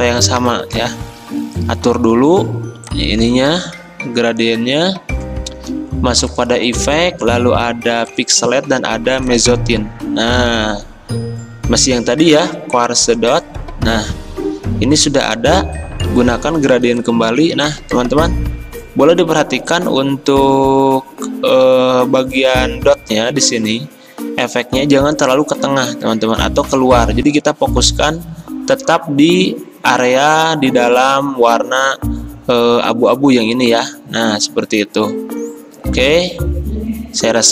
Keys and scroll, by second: 1.3 g, 15.8 g.